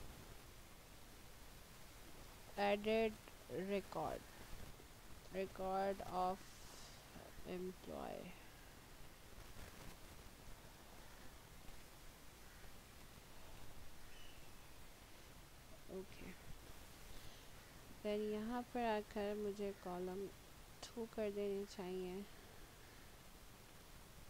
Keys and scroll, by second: 1.2-7.3 typing, 8.3 BackSpace, 10.4-13.0 typing, 20.7 2.